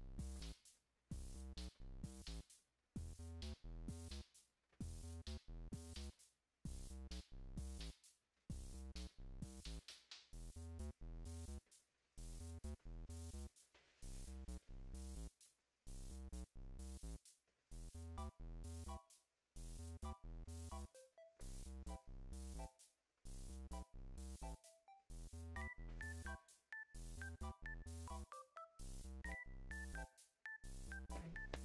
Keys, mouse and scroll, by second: 0.3 alt+click, 0.8-5.6 alt+drag, 6.1 alt+click, 7.7 alt+shift+click, 8.6 alt+click, 9.4 alt+click, 10.5-11.9 alt+shift+drag, 12.1 alt+click, 13.4 alt+click, 14.9 alt+click, 15.9 alt+click, 18.8-20.3 alt+shift+drag, 20.7 ctrl+z, 21.4 click, 23.2 click, 24.6 shift+click, 25.7 click, 26.3 alt+right click, 27.1-29.5 alt+drag, 30.5 alt+right click.